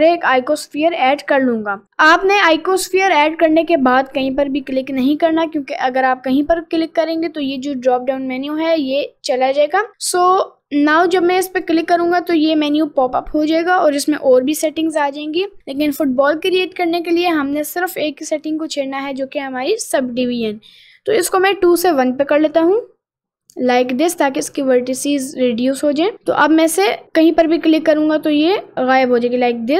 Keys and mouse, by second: 11.8 click, 22.9 click.